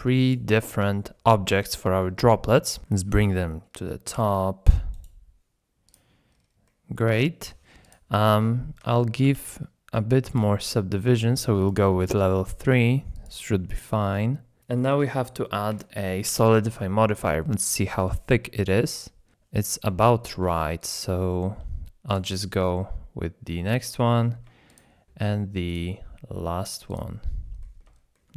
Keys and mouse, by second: 0.2-1.7 drag, 2.2-2.7 middle drag, 2.8 g, 2.8 z, 4.1 KP_1, 6.6-7.5 middle drag, 10.3 ctrl+click, 11.6 ctrl+click, 13.1 click, 15.7 click, 16.3 KP_7, 16.8-17.9 drag, 18.5 alt+z, 20.8 click, 22.1-23.8 drag, 24.2 shift+drag, 24.7 click, 25.7-27.0 drag, 27.6 shift+click, 28.2 click.